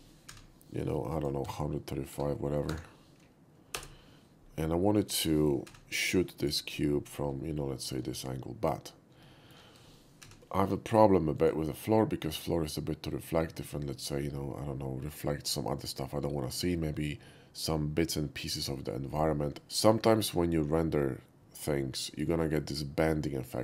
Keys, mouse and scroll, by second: 1.1 click, 1.4 1, 2.1 3, 2.7 5, 3.7 Return, 4.8 middle click, 5.6 Page_Down, 6.4 click, 6.9 middle click, 7.1 middle click, 7.5-7.9 shift+middle drag, 9.2 shift+middle click, 10.2 Page_Down, 11.4 click, 12.3 click.